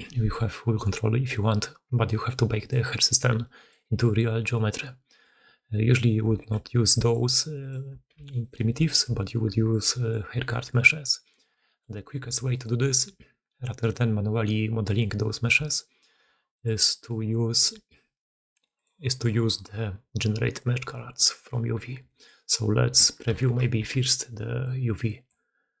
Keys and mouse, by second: 0.0-25.8 typing, 0.0 drag, 1.7 middle drag, 4.3-5.1 middle drag, 6.2 shift+middle drag, 9.8 middle click, 11.0 middle drag, 11.5 shift+middle drag, 13.7 middle click, 16.2-18.8 middle drag, 21.9 middle click, 23.5 ctrl+shift+q.